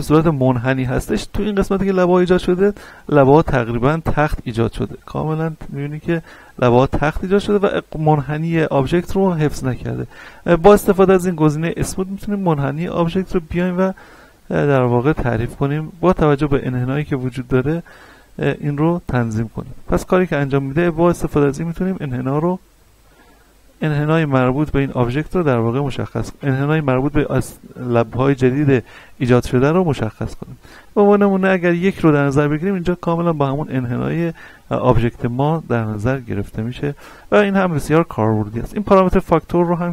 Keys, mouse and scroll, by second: 2.6-4.7 middle drag, 4.7 scroll up 1, 5.0 shift+middle click, 5.4 scroll up 1, 10.4-10.9 scroll up 1, 12.0-20.6 drag, 20.6-25.5 drag, 29.4-29.8 scroll down 2, 30.2-32.0 scroll up 2, 34.7 scroll down 1, 35.2 scroll up 1, 35.7 scroll down 1, 39.5-39.9 drag.